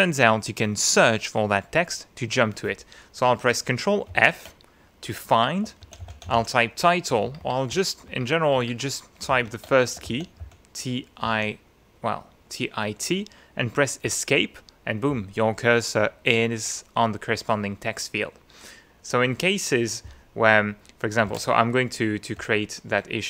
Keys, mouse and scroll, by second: 4.1 ctrl+f, 5.6-7.1 typing, 9.3 ctrl+f, 10.0 ctrl+shift+t, 10.4 shift+i, 11.2 t, 14.0 Escape, 21.3 alt+Tab, 23.1-23.2 typing.